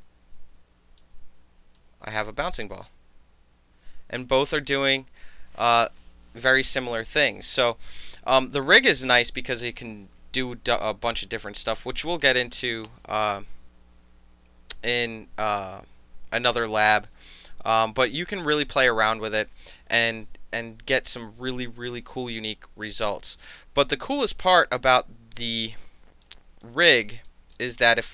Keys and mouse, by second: 0.0-1.0 alt+drag, 1.8 alt+click, 24.1 click, 25.8-26.3 alt+right drag, 26.7-27.0 alt+middle drag, 27.3 alt+click.